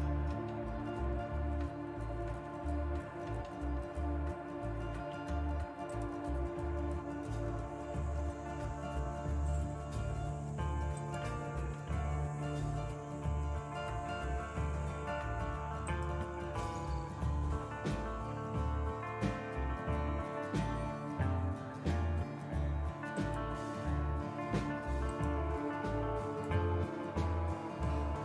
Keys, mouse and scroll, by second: 5.8-6.8 drag, 7.0-7.9 scroll down 2, 11.0 click, 12.1-13.9 scroll down 2, 13.9 scroll down 1, 15.8-17.2 shift+drag, 23.2 click, 25.0-28.2 drag.